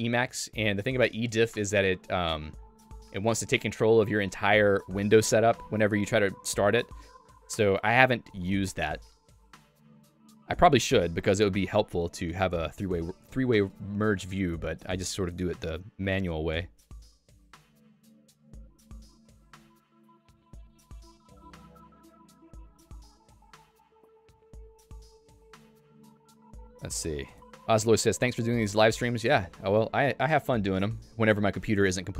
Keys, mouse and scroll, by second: 27.2 click, 30.1 Escape.